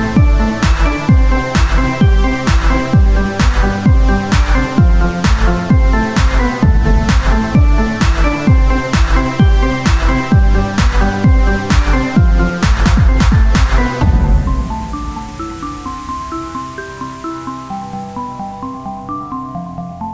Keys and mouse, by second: 1.5-4.6 drag, 2.8-3.8 right drag, 4.6 z, 6.0-7.0 drag, 8.5-9.8 drag, 8.6 z, 9.8 z, 10.7 click, 11.6 Tab, 13.1 ctrl+Tab, 14.2 KP_1, 14.7 z, 17.3-18.6 drag, 17.3 z, 18.6 e, 19.4 z, 19.6-20.1 drag.